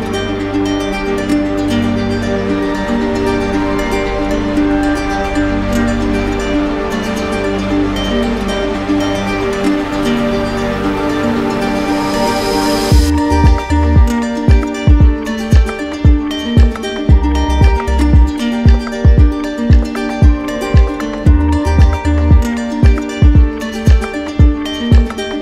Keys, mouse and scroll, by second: 0.9 click, 2.6 z, 4.6 click, 5.6 right click, 6.1 right click, 6.7 click, 7.4 shift+right click, 9.5 click, 10.1 ctrl+z, 10.8 click, 11.8 click, 13.1 click, 13.7 right click, 15.9 click, 16.3 ctrl+z, 18.7 click, 19.4 ctrl+z, 20.1 right click, 21.0 click, 21.6 shift+right click, 23.6 click, 25.1 click.